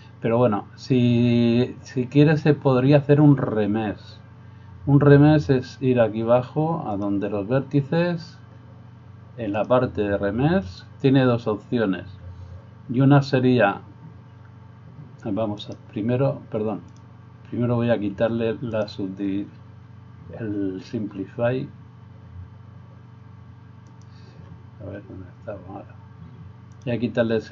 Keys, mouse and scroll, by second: 6.9 click, 9.6-16.9 drag, 15.6 right click, 18.7 click, 24.0 click.